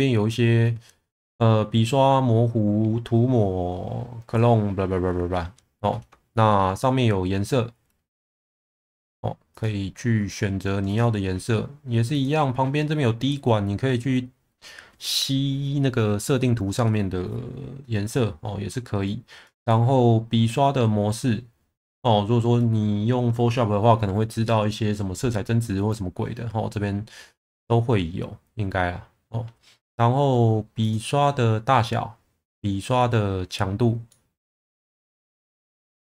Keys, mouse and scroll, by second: 6.3 shift+middle click, 34.1-35.8 middle drag.